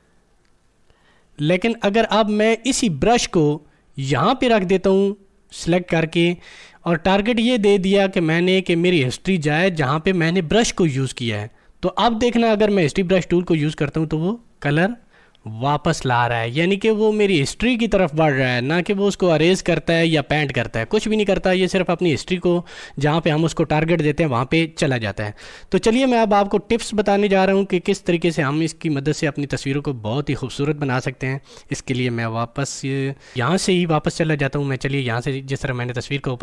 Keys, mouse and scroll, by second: 7.6 click, 13.9-24.5 drag, 31.5 ctrl+Num_Lock.